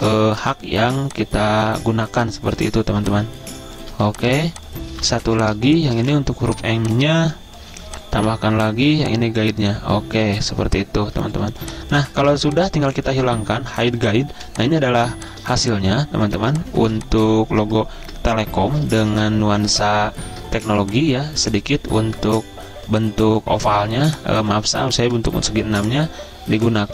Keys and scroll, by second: 0.2-1.3 typing, 4.3-6.5 typing, 8.1-8.6 typing, 11.9 z, 14.7 z, 15.4 z, 16.9-17.7 typing, 18.4 ctrl+g, 19.5 v, 21.0 z, 22.5 v, 24.2 z, 25.4 v.